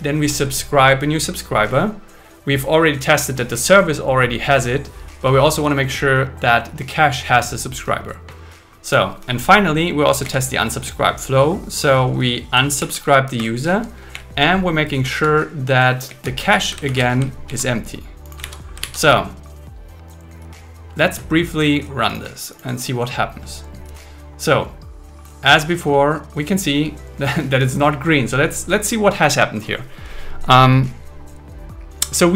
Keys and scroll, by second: 10.2 Down, 12.8 super+Right, 13.4 Return, 14.1 Up, 16.1 Down, 16.9 shift+super+Right, 17.5 super+c, 18.4 super+v, 18.8 super+s.